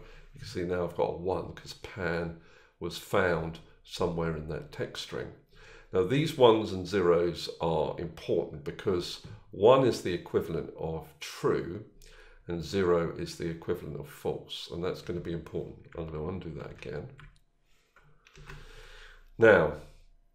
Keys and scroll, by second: 16.6 ctrl+z.